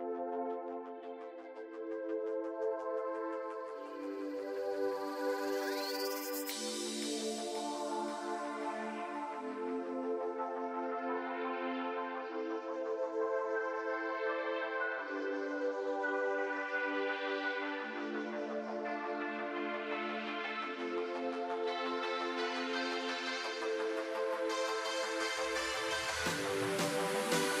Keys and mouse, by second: 1.7 ctrl+r, 3.5 a, 3.8 z, 4.2 b, 5.5 z, 6.1-8.7 drag, 11.7 ctrl+z, 12.9 ctrl+z, 13.5 ctrl+z, 15.0 ctrl+z, 15.7 ctrl+r, 17.2 a, 17.7 b, 19.8-20.9 drag, 21.2 ctrl+z, 21.8 z, 22.3 b, 24.2 x, 25.6 ctrl+r.